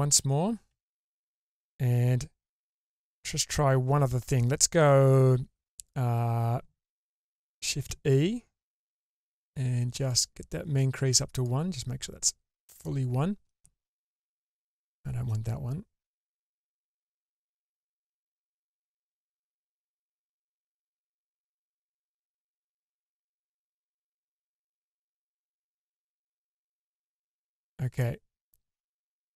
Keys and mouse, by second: 0.1 ctrl+z, 0.7 ctrl+z, 7.8-10.5 shift+e, 10.7 shift+e, 11.5 click, 12.9 shift+middle click, 14.5 shift+click, 16.3-17.3 drag, 19.1 ctrl+z, 21.9 shift+click, 26.0 click, 27.9 middle click.